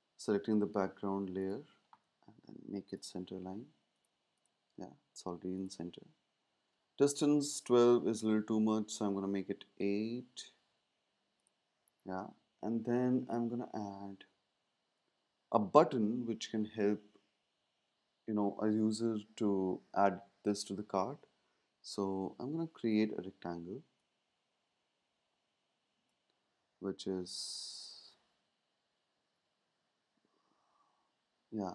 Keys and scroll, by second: 7.5 shift+Up, 8.1 Down, 11.9 super+s, 28.6 Up, 29.2 Down, 29.4 Down.